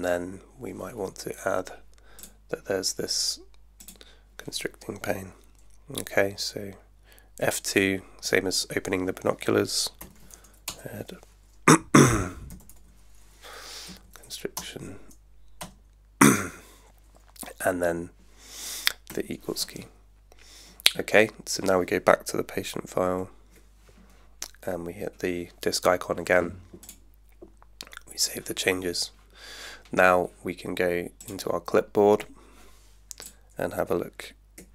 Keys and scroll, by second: 7.4 F2, 9.8-10.8 typing, 12.3-13.4 typing, 13.9 Down, 14.5 Return, 19.1 space, 23.1 alt+3, 34.6 super+F2.